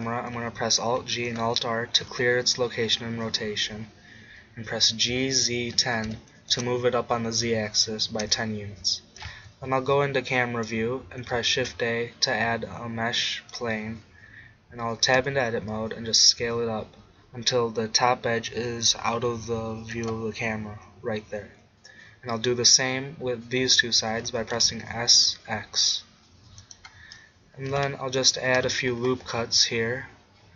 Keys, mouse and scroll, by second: 0.9 alt+g, 1.4 alt+r, 4.8 g, 8.2 KP_0, 11.6 shift+a, 15.2 Tab, 16.4 s, 20.1-22.6 drag, 24.3 s, 26.7-28.5 drag, 28.5 ctrl+r.